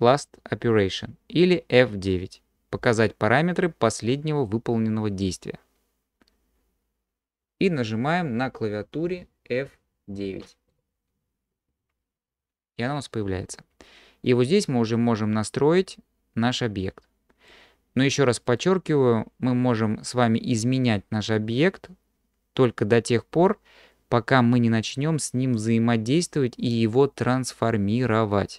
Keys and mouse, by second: 11.8 F9.